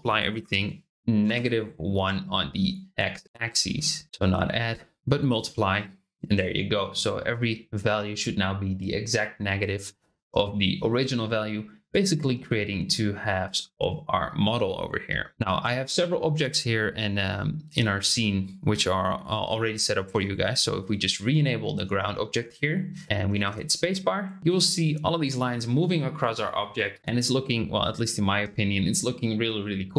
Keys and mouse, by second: 4.0-5.3 drag, 11.8 click, 12.3-14.1 middle drag, 20.1 click, 23.0 middle click, 23.5 space.